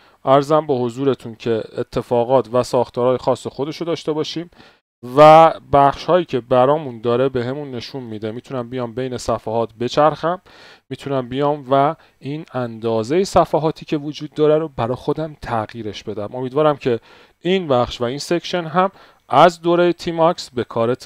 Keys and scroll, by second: 0.9-2.6 typing, 5.9 ctrl+b, 6.1 n.